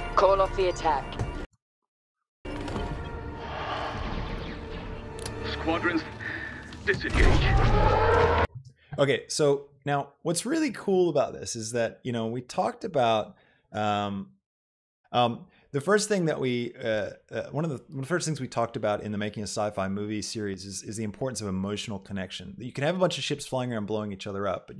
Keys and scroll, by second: 1.4 space, 8.4 space.